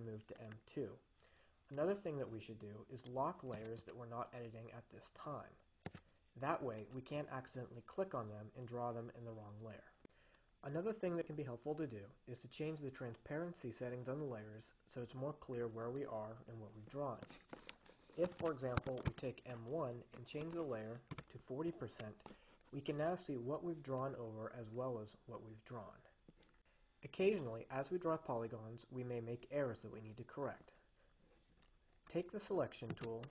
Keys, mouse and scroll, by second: 3.9 click, 6.6 click, 18.6 click, 19.1 ctrl+a, 20.2-21.1 typing, 21.4 Return, 22.9 Escape, 33.2 click.